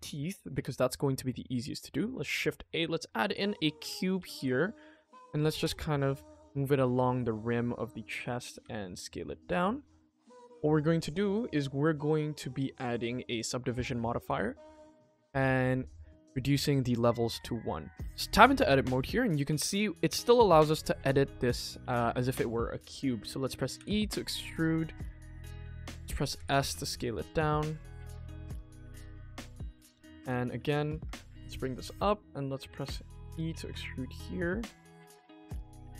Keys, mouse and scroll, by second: 0.2 middle drag, 0.5 shift+a, 7.5-7.8 scroll up 3, 7.9 shift+middle click, 8.5 g, 9.6 middle drag, 10.0 g, 11.0-13.3 drag, 13.6-15.2 scroll up 4, 14.2 s, 15.8 click, 16.5 scroll down 2, 17.2 Tab, 17.2-17.8 scroll down 2, 17.8 middle click, 18.1 click, 18.4 shift+middle click, 18.9 click, 19.4 middle click, 20.2 click, 20.6 middle click, 21.0 shift+middle click, 21.4 middle click, 21.6 middle click, 21.8 ctrl+s, 22.0 shift+middle click, 22.3 click, 23.7 e, 29.2 shift+middle click, 29.6 middle click, 30.0-30.6 scroll down 1, 30.6 click, 31.0 Tab, 31.3 g, 31.7 Tab, 32.1 middle click, 32.6 click, 33.0 middle click, 33.3 e.